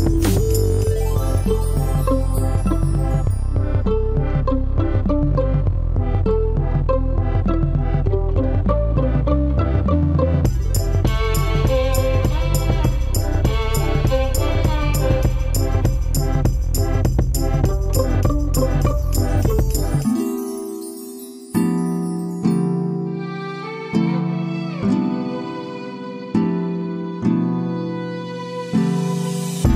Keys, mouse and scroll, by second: 2.6 ctrl+c, 3.0 Escape, 4.0 ctrl+v, 9.9 Escape.